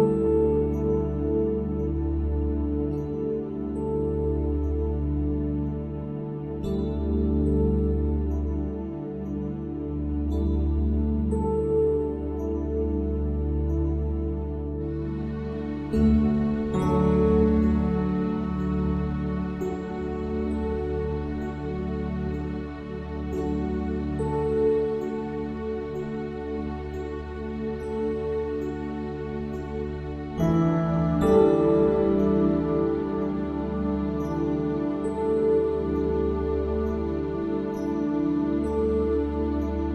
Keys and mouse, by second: 22.5 click, 29.7 click.